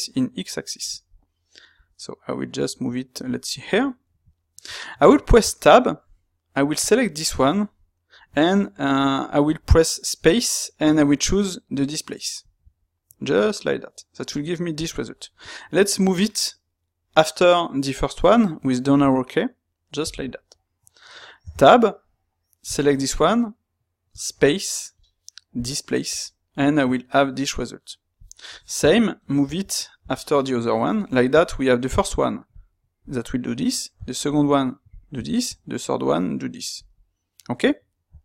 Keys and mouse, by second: 4.3-6.8 shift+middle drag, 6.8 click, 20.7-22.6 middle drag, 22.6 click.